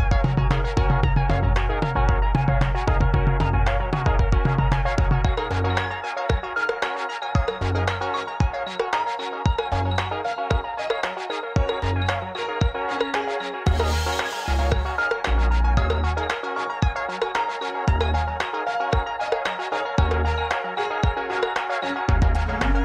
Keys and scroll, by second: 1.1 alt+z, 4.2 s, 5.1 alt+a, 5.5 alt+a, 5.9 alt+s, 6.7 s, 8.4 alt+z, 10.3 x, 10.4 x, 11.2 y, 20.2 ctrl+a, 22.5 alt+z.